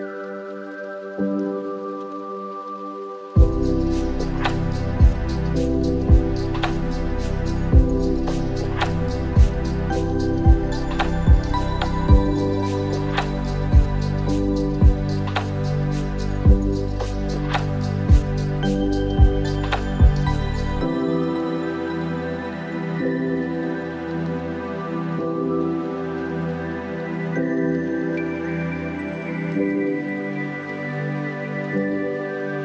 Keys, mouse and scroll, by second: 0.1-1.3 drag, 1.5-3.7 middle drag, 3.7 click, 4.5-5.7 drag, 6.6 alt+s, 8.0 click, 8.7 click, 9.5 click, 10.8 alt+s, 11.4 click, 11.9-12.3 scroll down 1, 12.3 middle click, 13.5 Tab, 13.9 click, 14.3-17.0 middle drag, 19.8 Tab, 20.4 click, 21.1 click, 22.3-23.3 middle drag, 23.7-25.1 drag, 25.5-26.5 middle drag, 26.6 scroll up 1, 27.3 click, 28.0-29.7 drag, 30.1 scroll down 1, 30.4-31.6 middle drag, 31.6 scroll up 1, 32.2 click.